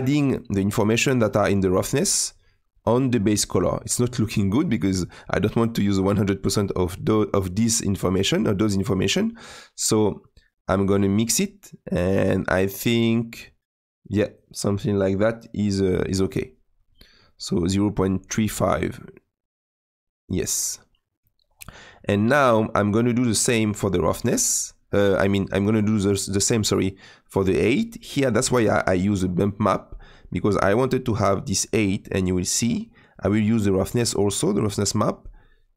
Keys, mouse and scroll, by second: 18.5-35.7 middle drag.